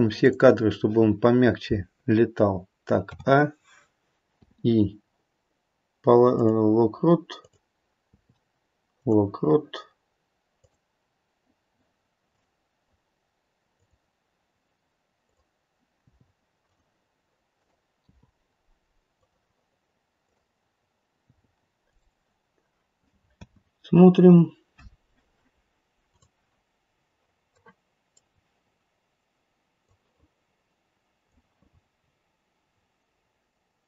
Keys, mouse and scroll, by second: 0.1 click, 3.0 a, 4.3 i, 7.4 click, 8.1 i, 10.5 click, 12.3 click, 13.7 click, 15.2 click, 16.0 i, 17.5 click, 17.9 i, 20.2 click, 21.1 i, 23.3 space, 26.0 click, 27.5 middle click, 27.9 middle click, 29.7 click, 31.9-32.7 scroll up 5, 32.7 scroll down 2.